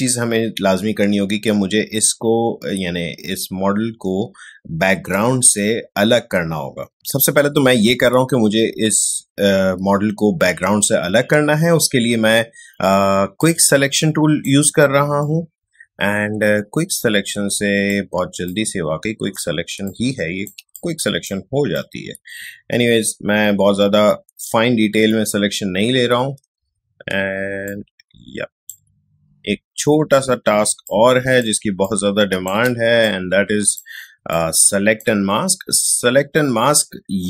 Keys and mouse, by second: 13.4-19.6 drag, 19.6 space, 19.8-26.6 ctrl+drag, 26.6 space, 27.7-30.6 alt+drag, 30.6 space, 30.8 click, 31.1 space, 31.8-37.2 ctrl+drag.